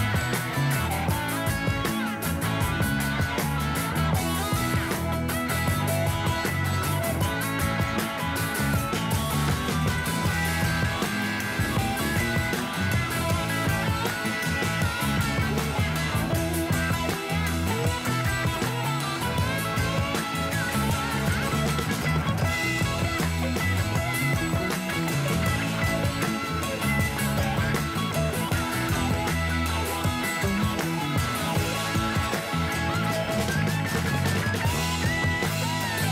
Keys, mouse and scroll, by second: 0.3 click, 6.5 click, 7.0 click, 8.3 KP_3, 9.7 shift+click, 10.2 shift+click, 10.8 shift+click, 11.3 shift+click, 11.9-12.4 shift+middle drag, 12.4-13.6 scroll up 3, 14.0-16.0 drag, 16.0 s, 19.4 click, 20.0-21.1 scroll down 2, 21.1 space, 22.5-23.0 drag, 33.5 drag, 34.7 click, 35.3-36.1 middle drag.